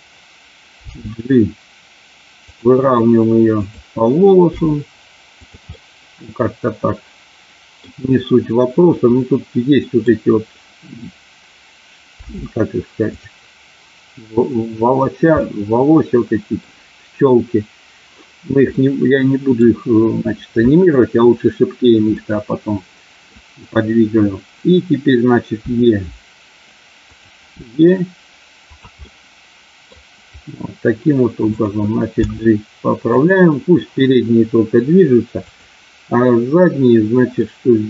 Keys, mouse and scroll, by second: 0.9 g, 2.5 click, 3.5 click, 4.5 g, 5.7-7.9 middle drag, 9.2 middle click, 12.2 g, 15.4-16.6 middle drag, 18.7 middle click, 22.2-23.3 middle drag, 25.6 e, 27.0 click, 27.5 e, 28.6 click, 29.0 middle click, 31.3 click, 32.1 g, 33.1 click, 37.3-37.8 middle drag.